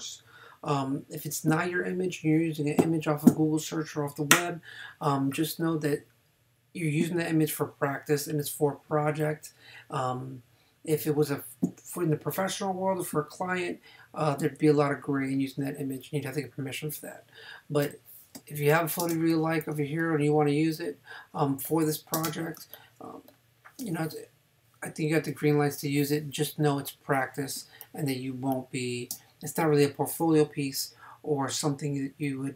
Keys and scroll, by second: 18.4 space, 22.2 space, 27.6 space.